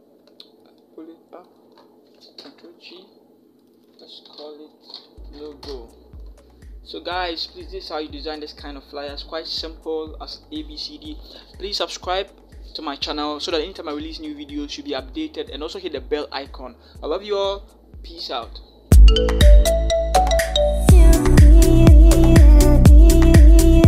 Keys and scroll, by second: 2.2 ctrl+g, 4.5 Caps_Lock, 4.6-5.4 typing.